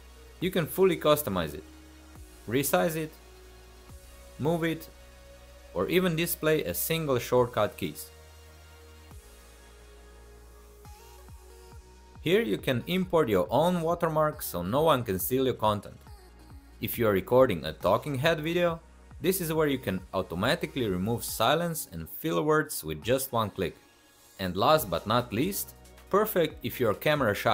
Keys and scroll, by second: 1.1 shift+a, 5.7 shift+a, 9.1-11.5 typing.